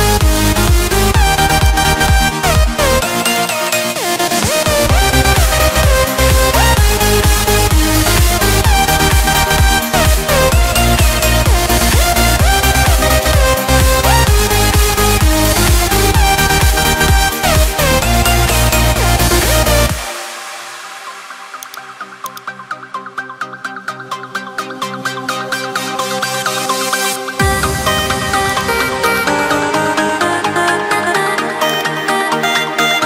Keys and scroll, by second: 2.9 ctrl+t, 7.4 Return, 20.6 ctrl+t, 25.0 Return, 26.9 ctrl+alt+shift+e, 29.5 Return.